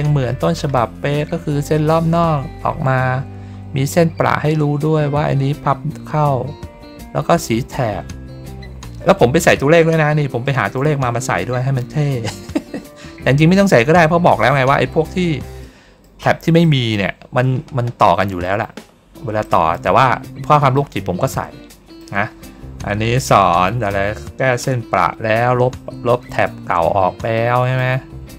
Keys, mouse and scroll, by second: 0.0 ctrl+middle click, 0.2 ctrl+middle click, 4.2 ctrl+middle click, 5.7 ctrl+middle click, 7.1 ctrl+middle click, 10.3 middle click, 15.5 middle click, 16.5 middle click, 17.1 ctrl+middle click, 18.3 middle click, 19.3 middle click, 19.9 middle click, 20.4 middle click, 21.6 middle click, 26.1 middle click, 27.2 middle click.